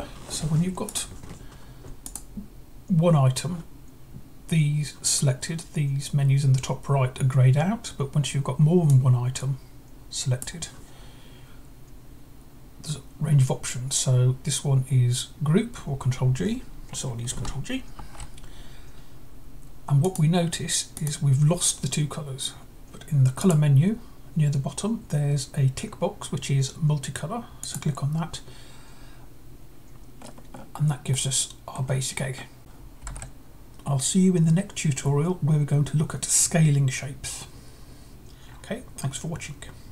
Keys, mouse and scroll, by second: 0.7-1.7 drag, 1.8-2.8 drag, 8.6-10.2 drag, 17.7 ctrl+g, 19.8-21.8 drag, 23.2-24.2 drag, 27.4-28.5 drag, 30.0-30.9 scroll up 2, 30.9-31.9 middle drag, 32.1-32.6 scroll up 2, 32.6 click, 33.1 alt+Tab.